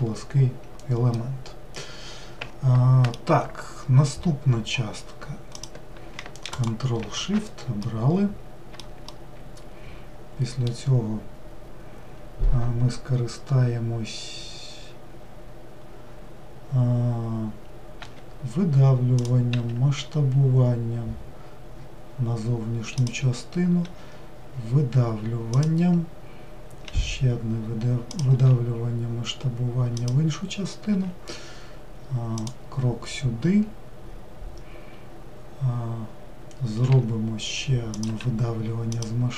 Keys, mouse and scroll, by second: 0.8-6.2 middle drag, 6.2-7.5 ctrl+shift+drag, 7.5-39.3 middle drag.